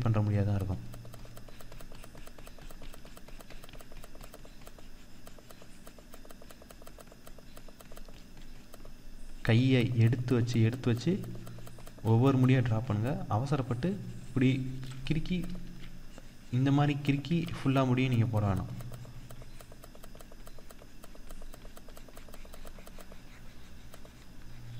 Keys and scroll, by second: 15.1 ctrl+z.